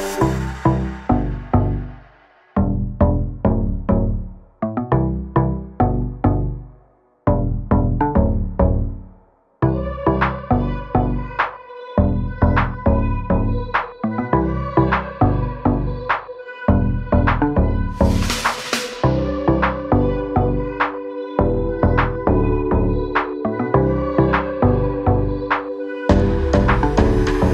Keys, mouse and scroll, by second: 0.1 scroll down 1, 0.5 scroll up 1, 1.3 ctrl+click, 2.0 ctrl+click, 2.7 ctrl+click, 4.2 double click, 4.7-5.6 scroll down 1, 5.6 click, 5.9 double click, 6.4 scroll down 1, 13.8 click, 15.0 scroll down 1, 15.2 scroll up 1, 15.7 click, 17.1 ctrl+o, 19.8 click, 22.6 click, 24.7 click, 26.9 click.